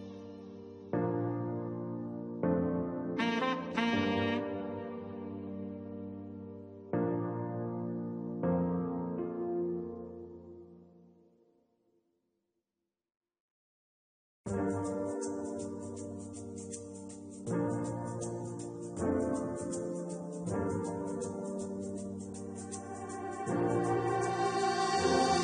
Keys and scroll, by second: 13.2 1, 13.8 3, 14.4 9, 14.7 3, 17.7-19.1 typing.